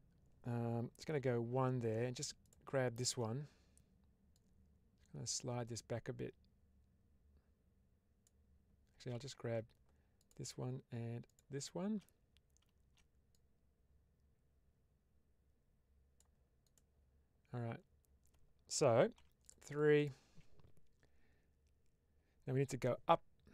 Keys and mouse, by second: 1.0 1, 4.2-8.1 drag, 9.0 ctrl+z, 10.1 shift+click, 13.3-16.1 drag, 16.5 click, 19.3 click, 19.3 3, 22.7 middle click.